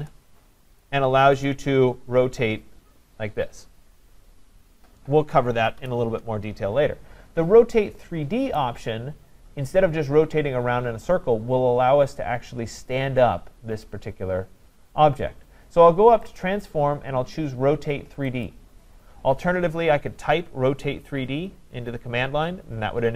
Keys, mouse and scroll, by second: 0.0 Return, 0.8 click, 1.5 click, 5.8 Escape, 8.6 right click, 8.9 scroll, 16.4 click, 18.4 click.